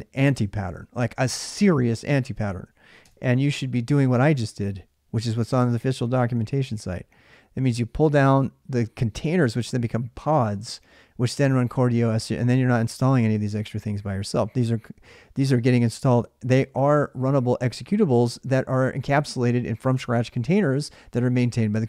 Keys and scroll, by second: 2.8 alt+Tab.